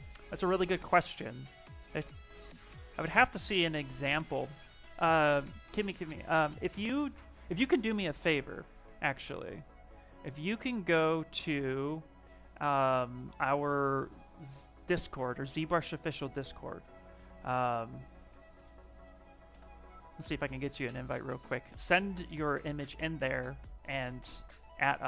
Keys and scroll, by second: 18.0 d, 18.3 i, 19.2 Return.